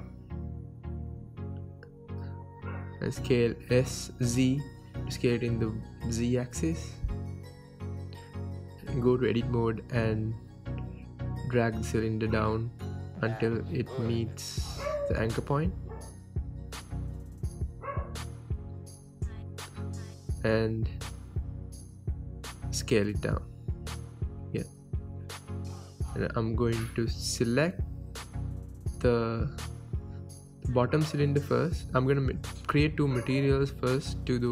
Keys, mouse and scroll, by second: 0.5 s, 1.4 click, 1.4 scroll, 2.0 g, 2.7 click, 2.8-3.2 scroll, 3.2 s, 3.9 right click, 4.1 s, 4.8 click, 4.9 scroll, 5.2 shift+middle click, 5.5 s, 6.7 click, 6.9 scroll, 7.3 s, 8.6 click, 9.0-9.4 scroll, 9.9 Tab, 10.7 g, 13.0 click, 13.2 Tab, 13.5-14.5 scroll up 4, 13.8 shift+middle drag, 14.6-16.4 middle drag, 15.2 g, 16.4 right click, 16.5 Tab, 17.0 g, 19.2 click, 19.3 Tab, 19.4-19.7 scroll down 2, 20.1 g, 21.8 click, 21.9-22.6 scroll, 23.2 g, 24.4 click, 25.0 s, 26.2 click, 26.4-27.9 middle drag, 27.9 click, 28.4 KP_1, 29.7 shift+click, 30.9-33.2 drag, 33.8 drag.